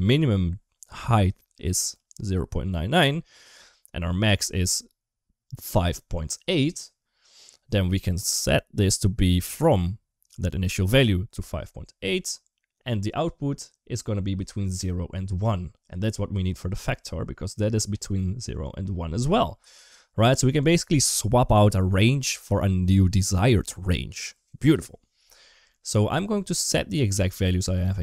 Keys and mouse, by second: 4.1 click, 15.9 middle click, 16.9-19.0 drag, 19.6 ctrl+z, 20.0 middle click, 25.5 middle click, 27.0 click.